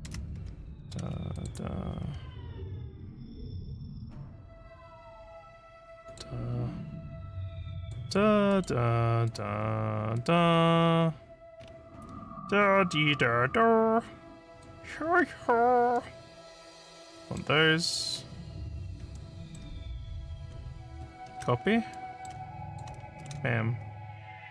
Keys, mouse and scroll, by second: 0.1 ctrl+c, 1.3 ctrl+click, 6.1 ctrl+click, 7.8 ctrl+click, 8.5 ctrl+click, 9.3 ctrl+click, 10.2 ctrl+click, 10.8 ctrl+scroll up 1, 10.9 scroll down 4, 11.6 scroll up 3, 14.5 ctrl+click, 15.3 ctrl+scroll down 2, 16.0-17.4 ctrl+middle drag, 19.2 ctrl+middle click, 21.3 ctrl+c, 22.0 ctrl+middle click, 22.7 click, 23.2 ctrl+v.